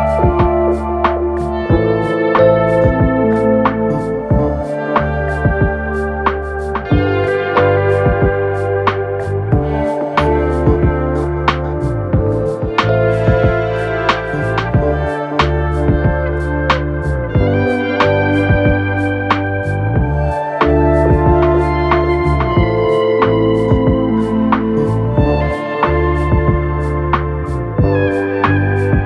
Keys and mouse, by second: 2.9-21.5 drag, 3.1 BackSpace, 19.5 BackSpace, 21.5-24.7 middle drag, 24.1 Tab, 24.7-29.0 drag.